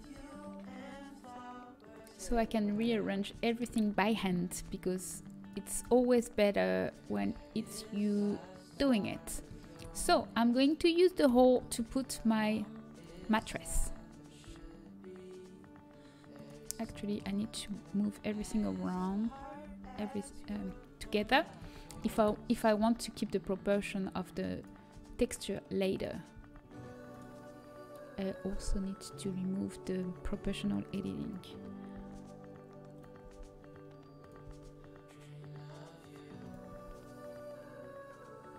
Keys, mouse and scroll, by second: 1.8-4.3 drag, 5.4 b, 5.7 s, 7.5 g, 9.9 a, 12.8 l, 12.8 g, 14.7 s, 18.7 l, 19.6 shift+l, 20.6 shift+l, 22.7 s, 25.1 g, 27.0 s, 32.4 s, 33.5 g, 36.6 g.